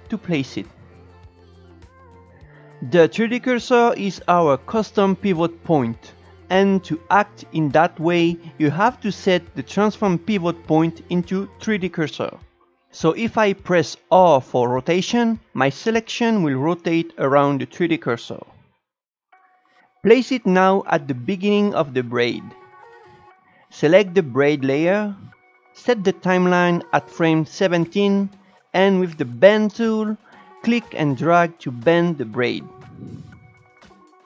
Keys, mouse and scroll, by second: 1.2 shift+right click, 5.8 click, 9.0-12.0 drag, 14.5 r, 22.5 shift+right click, 23.3-27.1 drag, 27.1 shift+right click, 27.9-29.8 drag, 33.8 shift+right click.